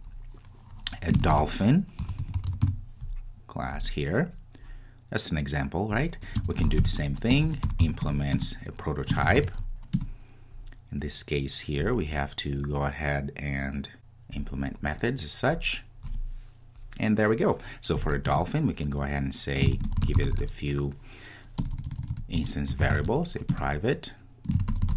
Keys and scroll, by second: 8.4 Return, 23.5 Return.